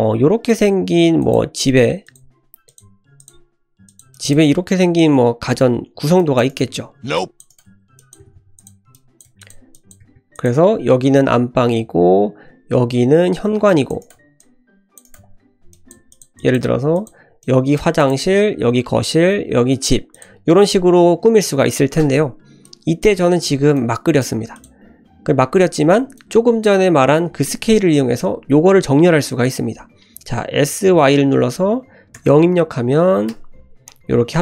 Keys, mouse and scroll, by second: 0.0 e, 1.4 e, 2.2 e, 2.8 e, 3.3 e, 4.1 click, 4.4 f, 6.2 click, 6.5 right click, 7.1 click, 7.5 right click, 8.0 click, 8.2 g, 8.9 click, 9.2 f, 9.4 click, 9.7 click, 10.0 g, 13.6 click, 14.0 right click, 14.4 click, 15.0 right click, 15.7 click, 15.9 f, 16.1 click, 16.3 click, 16.6 g, 17.4 click, 18.0 click, 20.1 click, 20.4-22.1 scroll up 1, 22.6 click, 23.7 click, 24.5 click, 26.1 click, 30.5 s.